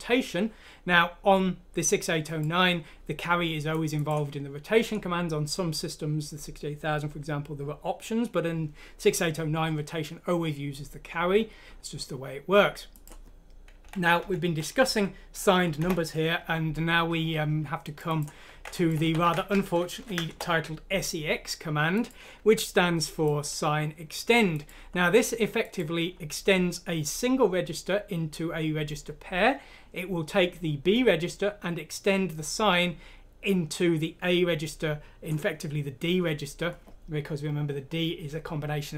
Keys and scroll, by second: 14.2 shift+Home, 19.9-20.3 typing, 22.3 Escape.